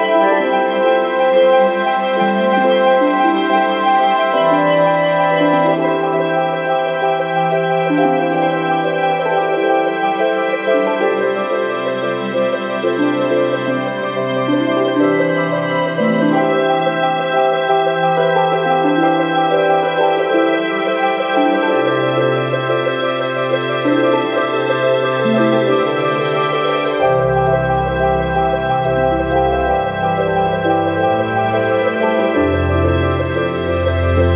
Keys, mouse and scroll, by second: 0.9-1.4 scroll down 1, 2.3 click, 5.1 click, 7.3 click, 8.6 click, 11.4 click, 14.6 click, 17.1 click, 18.5 2, 21.4 click, 24.4 click, 25.1-30.9 drag.